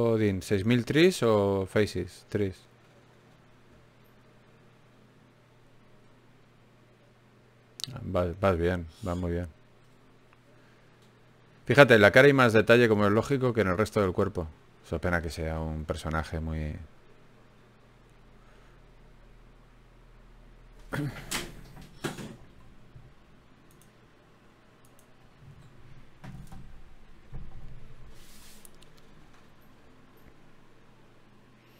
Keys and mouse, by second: 1.6-2.8 drag, 2.8 Tab, 3.9 a, 8.4 Tab, 8.8 x, 10.2 Tab, 12.4 ctrl+Tab, 13.4 click, 14.2-15.2 middle drag, 16.0 ctrl+Tab, 19.7 click, 20.1 g, 20.8 g, 22.2 click, 22.8 click, 24.3 g, 25.5 g, 27.3 e, 28.3 e, 30.1 e.